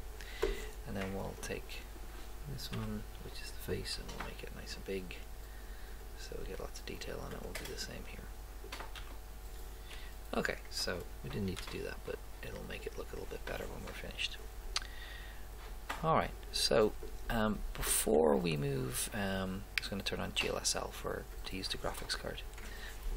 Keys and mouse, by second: 2.7 a, 4.0 s, 7.4-9.1 right drag, 9.1 a, 10.0 g, 11.6 s, 16.9 click, 18.4 click.